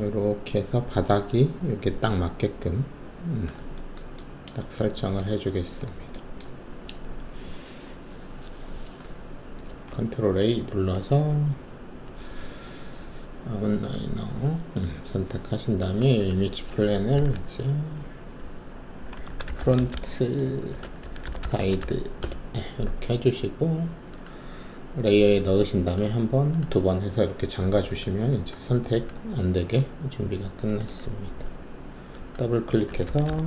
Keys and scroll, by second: 9.8 ctrl+a, 19.2-21.8 typing, 22.2 Return, 33.0-33.4 typing.